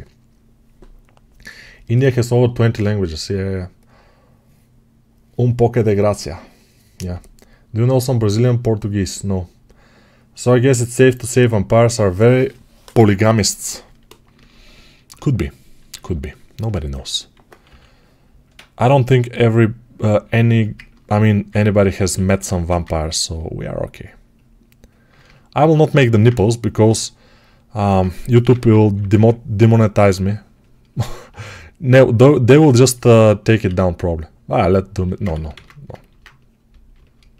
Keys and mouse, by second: 13.7-20.3 alt+right drag, 15.8 alt+q, 17.5 6, 21.4-22.4 ctrl+alt+drag, 22.4 1, 22.7-26.7 ctrl+drag, 26.7-37.3 alt+right drag, 28.3 p, 28.5 [, 28.7 [, 33.5 1, 35.2 ctrl+z.